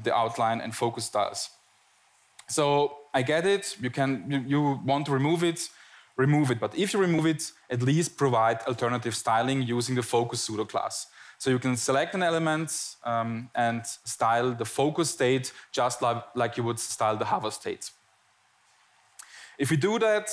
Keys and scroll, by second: 0.0 Tab, 3.0 Tab, 3.8 Tab, 4.4 Tab.